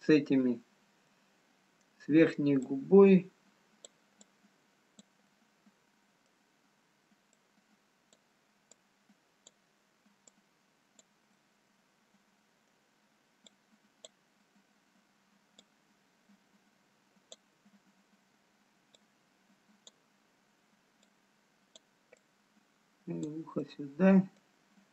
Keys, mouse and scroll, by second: 0.0 click, 0.0 middle click, 1.2 middle click, 3.3 click, 4.5 click, 6.3 middle click, 7.6 click, 8.8 click, 11.1 click, 11.3 middle click, 13.5 click, 15.7 click, 19.5 click, 22.2 click, 24.5 middle click.